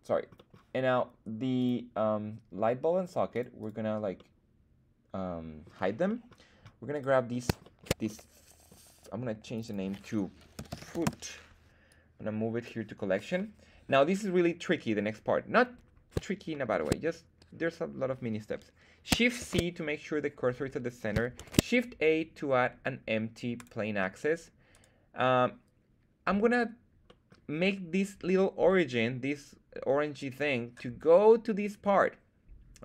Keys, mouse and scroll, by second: 0.3 middle drag, 1.5 click, 3.3 click, 3.6 click, 4.1-5.9 middle drag, 6.2 middle drag, 6.9 right click, 7.6 shift+middle drag, 8.0-8.7 middle drag, 9.5 click, 9.6-11.5 drag, 10.8 o, 11.8-12.6 drag, 13.3-13.8 middle drag, 16.5-16.8 shift+middle drag, 19.3 shift+c, 21.3 shift+a, 24.7 right click, 27.0 middle drag.